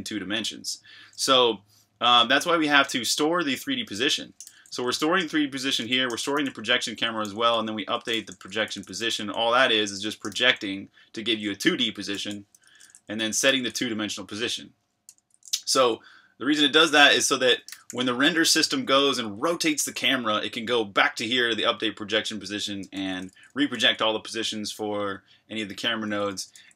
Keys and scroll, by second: 3.6 Escape, 4.4 typing, 5.7-10.3 typing, 12.5 Escape, 12.6 j, 12.8 j, 12.9 j, 13.4 shift+v, 15.1 Escape, 15.1-19.8 typing, 22.8 Escape, 22.9 k, 23.5 k, 26.3-26.7 typing.